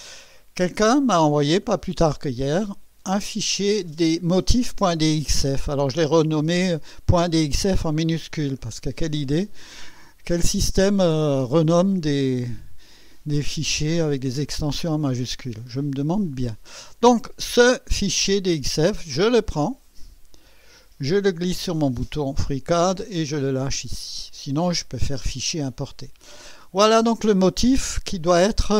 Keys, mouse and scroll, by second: 0.6 click, 5.7 click, 19.2-21.6 drag.